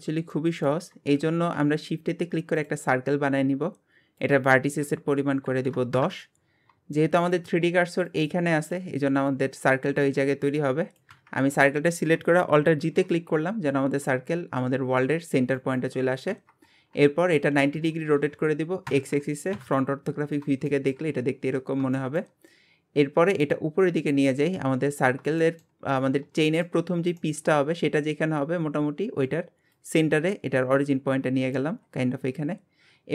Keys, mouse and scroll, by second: 0.3 middle click, 1.2 shift+a, 3.1 scroll down 2, 4.2-7.0 drag, 7.0 shift+middle click, 7.3 scroll up 2, 11.4 scroll down 1, 12.8 alt+g, 13.2-16.3 scroll up 2, 19.5 KP_1, 20.3-20.7 scroll down 2, 20.7-24.0 shift+middle drag, 24.0 click, 25.4 shift+middle click, 25.8-26.4 scroll up 1, 26.4 shift+middle click, 26.8-27.2 scroll up 1, 27.2 shift+middle click, 27.6-29.7 scroll up 1, 29.7 click, 31.8-33.1 scroll down 10.